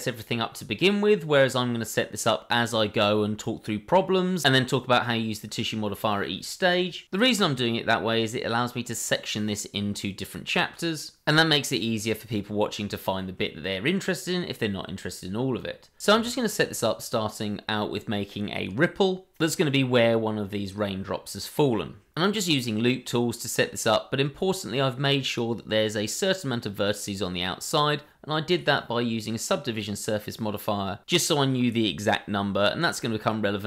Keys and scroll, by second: 5.0 Tab, 6.1 i, 8.3 g, 10.9 i, 12.1 i, 13.1 g, 14.4 i, 17.4 g, 19.3 i, 20.5 i, 21.4 g, 23.6 h, 24.4 ctrl+z, 24.7 g, 28.3 Tab, 31.4 ctrl+e, 32.8 ctrl+z.